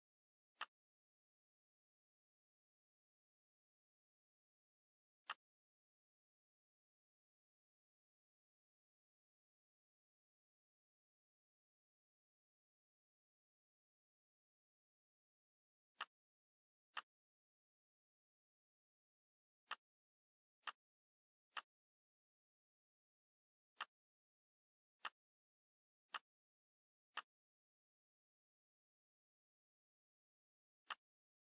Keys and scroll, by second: 3.9 ctrl+d.